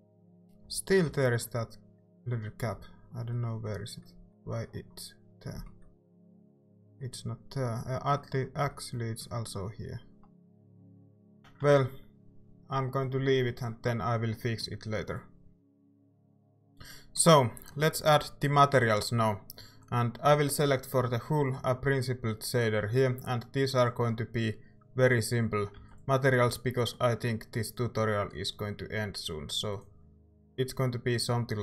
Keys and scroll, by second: 0.3-0.6 typing, 1.1 ctrl+s, 11.3 a, 11.7 ctrl+s, 25.8 ctrl+s.